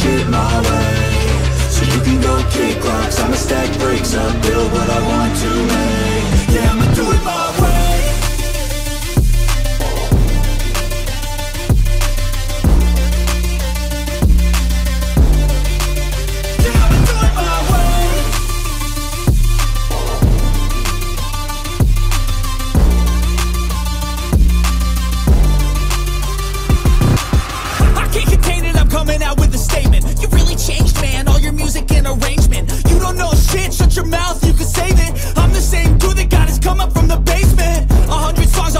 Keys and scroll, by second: 26.8 shift+Caps_Lock, 28.4 Caps_Lock, 31.2 ctrl+z, 35.5 x, 38.5 ctrl+alt+z.